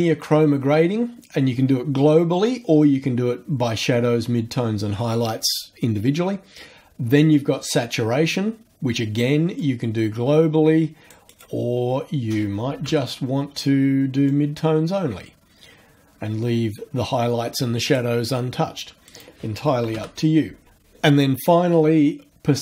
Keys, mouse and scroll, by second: 9.6-11.6 drag, 11.3 right click, 12.7 KP_0, 12.8 KP_Enter, 14.3-18.1 drag, 19.1 right click, 19.8 KP_0, 19.9 KP_Enter.